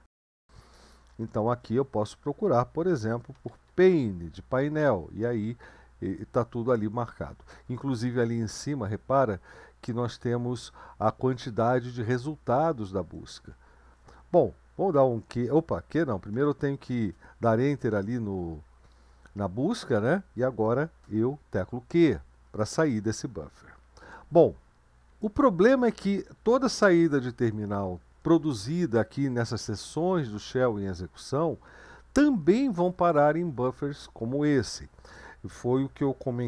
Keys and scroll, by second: 0.7-1.5 typing, 3.1-4.3 typing, 15.0 q, 17.0 Return, 21.4 q, 24.0 BackSpace.